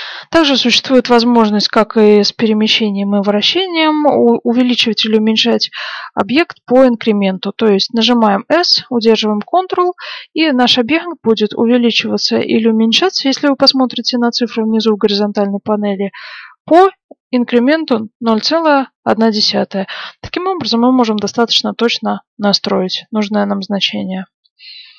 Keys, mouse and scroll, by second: 8.2 s.